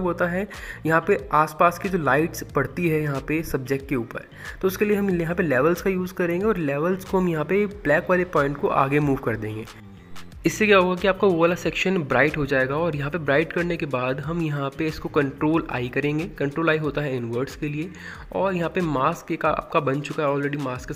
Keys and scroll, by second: 15.5 ctrl+i, 20.1-20.9 typing.